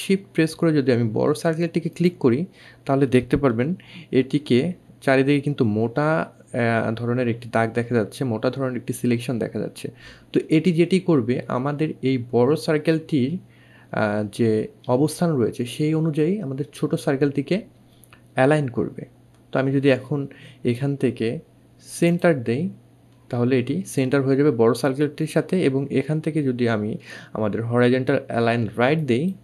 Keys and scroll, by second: 5.7 2, 12.4 2.